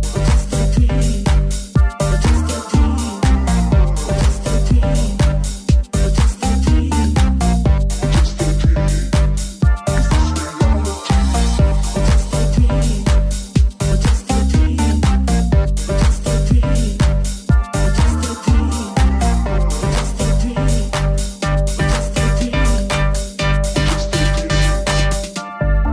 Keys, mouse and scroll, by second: 0.0 middle click, 0.0 shift+3, 0.5-2.0 middle drag, 2.0 shift+right click, 2.1-5.6 shift+middle drag, 5.6 middle click, 6.5 click, 8.4-10.0 drag, 8.4 w, 9.4 s, 10.0 ctrl+middle click, 10.2-16.1 ctrl+middle drag, 12.4 e, 13.4 r, 13.8 g, 14.9 e, 15.8 1, 16.1 alt+right click, 16.1-18.3 alt+middle drag, 16.4 s, 16.8 g, 18.3 right click, 18.3 middle click, 20.0 middle click, 22.5 middle click, 23.0-25.9 shift+middle drag.